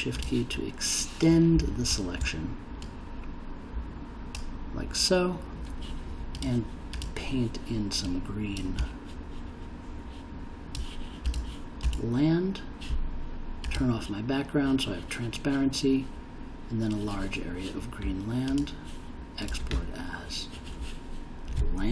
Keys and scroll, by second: 21.8-21.9 typing.